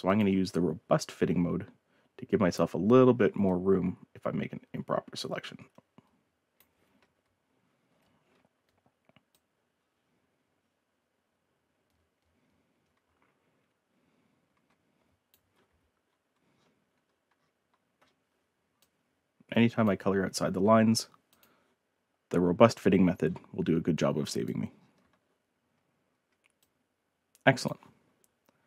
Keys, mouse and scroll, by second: 0.1 click, 0.9 scroll up 2, 1.6 middle click, 2.1-2.8 ctrl+scroll up 3, 2.8 ctrl+scroll down 2, 3.1 ctrl+middle click, 3.4-6.5 ctrl+drag, 8.2-12.2 ctrl+drag, 12.8 scroll down 2, 13.5 scroll up 2, 13.6-13.9 scroll down 4, 14.0 middle click, 14.5-18.1 ctrl+drag, 18.8-19.8 drag, 21.2 click, 23.2 scroll down 2, 23.6 middle click, 23.9-24.4 drag, 24.8 middle click, 26.6-27.6 drag.